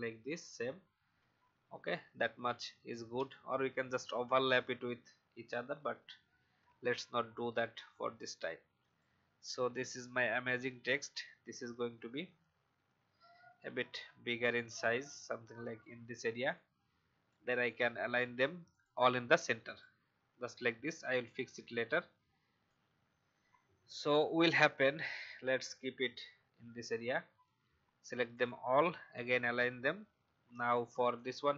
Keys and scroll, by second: 0.1 shift+Down, 1.2 Up, 3.4 Up, 3.5 Up, 3.7 Up, 5.4 Down, 5.6 Down, 5.8 Down, 31.5 Right.